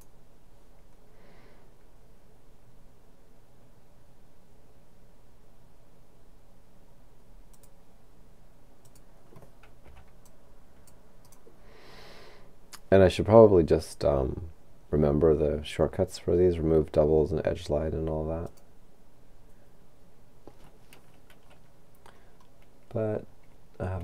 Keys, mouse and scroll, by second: 7.5 click, 8.9 click, 9.9 c, 10.3-12.4 drag, 11.3 right click, 18.5 click, 22.0-24.0 scroll down 2.